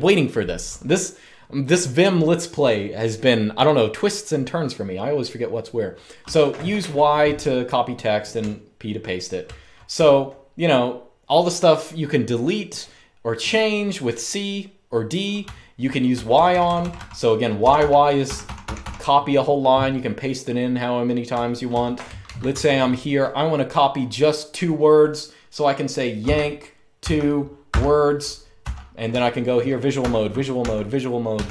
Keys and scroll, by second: 5.9 typing, 8.1-9.9 typing, 15.1-18.5 typing, 21.0-22.2 typing, 25.9-31.0 typing.